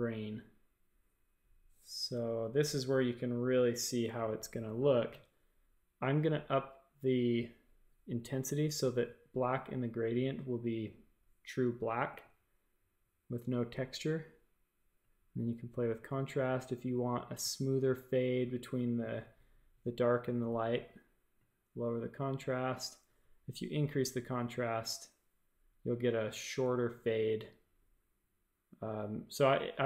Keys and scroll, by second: 2.1 super+=, 2.4 super+=, 2.8 super+=.